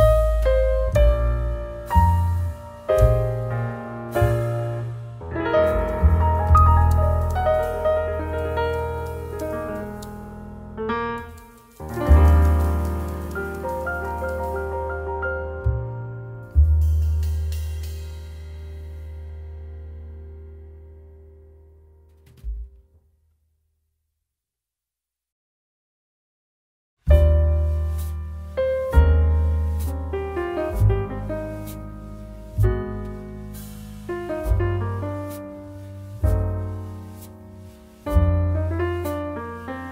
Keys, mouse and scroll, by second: 0.4 ctrl+v, 8.8-20.3 drag, 20.3-25.4 drag, 25.4-33.7 drag.